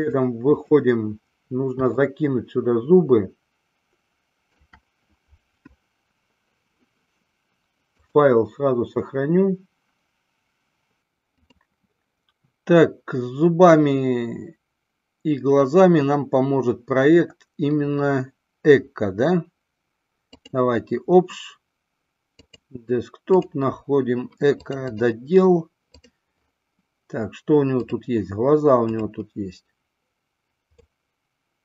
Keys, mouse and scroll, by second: 0.0-1.0 drag, 2.1-4.9 shift+middle drag, 8.0-11.0 drag, 11.5-20.9 drag, 30.9-31.6 middle drag.